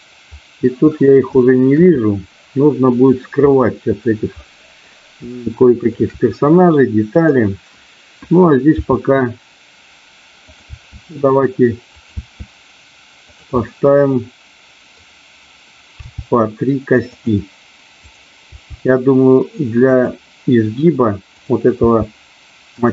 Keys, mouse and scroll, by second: 1.3 shift+middle click, 2.0-3.2 middle drag, 3.5 middle click, 4.3 middle click, 5.5 shift+middle click, 8.8 e, 10.5 click, 10.6 e, 12.0 click, 12.2 e, 13.3 click, 13.6-15.0 middle drag, 16.0 g, 17.1 click, 18.0 click, 18.5 g, 19.8 click, 21.7 g, 22.7 click.